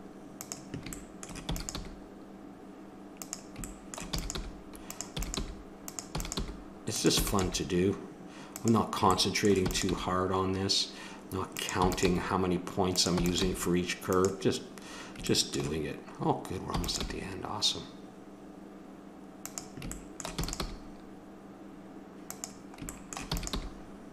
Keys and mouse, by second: 1.5 e, 3.7 click, 4.1-7.4 typing, 9.9 g, 11.8 e, 12.1 g, 13.2 e, 16.7 e, 17.2 g, 20.5 e, 20.7 g, 22.9 click, 23.3 e, 23.5 g.